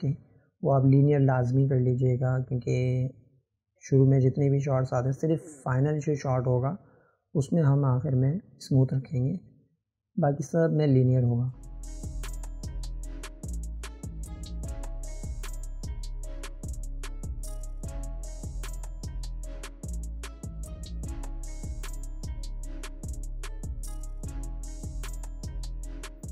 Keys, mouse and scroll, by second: 0.5-1.2 drag, 3.2 click, 5.9-6.3 drag, 7.1 click, 8.8 click, 9.8-11.9 drag, 13.2-14.0 drag, 14.9 click, 15.5 drag, 17.0-18.1 drag, 21.9 click, 24.0 click.